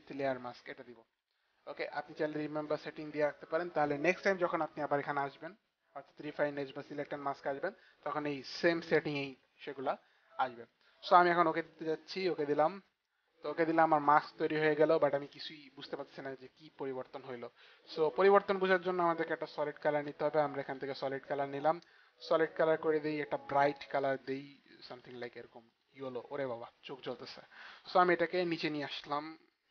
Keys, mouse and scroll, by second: 1.4 click, 12.0 click, 19.7 click, 20.8 click, 23.9 click, 24.7 click, 26.0 click, 27.3 click.